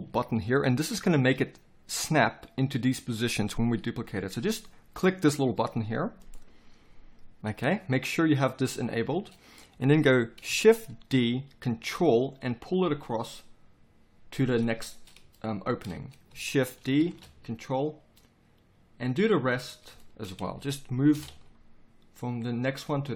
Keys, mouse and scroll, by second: 11.2 shift+d, 14.8-16.8 middle drag, 16.8 shift+d, 20.9 shift+d.